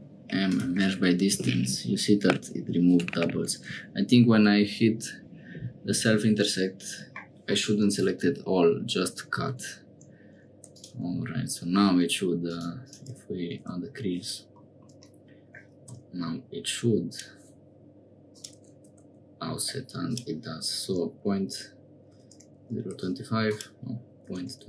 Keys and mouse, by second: 9.5 Tab, 10.0 Tab, 10.5 3, 10.7 click, 12.4 click, 12.8-14.0 drag, 15.0 middle click, 16.1 i, 18.3-19.9 drag, 20.0-24.6 drag.